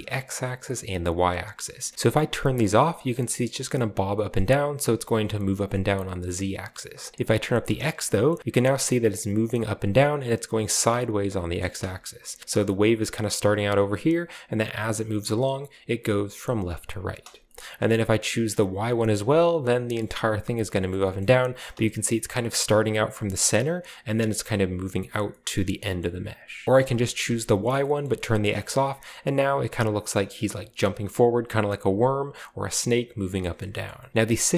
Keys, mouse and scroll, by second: 1.7 click, 2.1 click, 2.6-3.2 scroll down 2, 2.7-3.2 middle drag, 4.3-5.1 scroll up 2, 7.1 click, 7.4 click, 8.2-8.8 middle drag, 8.5-9.1 scroll up 1, 11.4 middle click, 11.8 space, 12.2-13.3 drag, 13.6 click, 15.1 click, 17.0 space, 17.6-18.6 middle drag, 18.6 click, 19.0-19.9 scroll down 1, 19.9 middle click, 20.9 middle click, 21.2-22.0 middle drag, 21.2-21.7 scroll up 1, 21.7 scroll up 1, 21.7 space, 22.5 click, 26.5 click, 26.9-27.3 scroll down 2, 27.1 space, 27.7 shift+middle click, 28.0 shift+middle click, 28.4 shift+middle click, 28.7-29.9 middle drag, 29.9 scroll down 1, 33.5 shift+middle click, 33.8 shift+middle click, 34.1 typing.